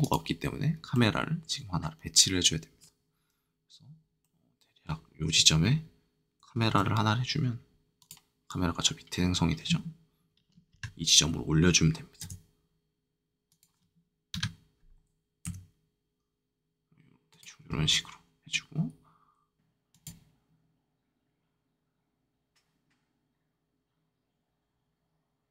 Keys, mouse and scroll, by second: 0.9 middle click, 3.6 middle click, 4.2-6.6 middle drag, 7.9-12.0 shift+drag, 10.7 KP_1, 12.2 g, 13.4-15.4 drag, 14.3 KP_3, 15.4 g, 17.2-23.1 drag, 23.8-25.5 drag.